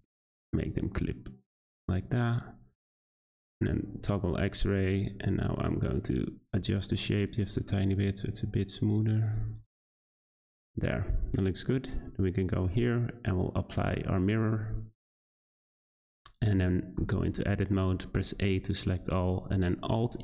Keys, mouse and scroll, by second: 2.7 z, 4.8 g, 6.2 click, 6.6 g, 7.8 click, 8.0 g, 9.5 click, 9.8 scroll down 2, 10.1 middle click, 10.4 Tab, 12.6-14.5 drag, 15.1 middle drag, 15.3 z, 16.3 click, 17.0 Tab, 18.1 a, 19.9 alt+e.